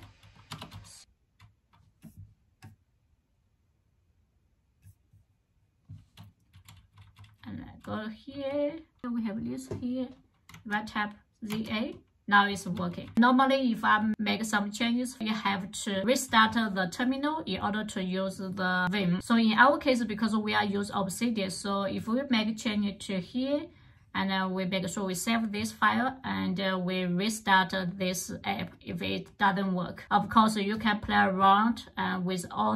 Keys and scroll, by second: 0.0-0.3 typing, 0.4 Return, 1.1 Return, 6.4-8.6 typing, 10.3-13.6 typing.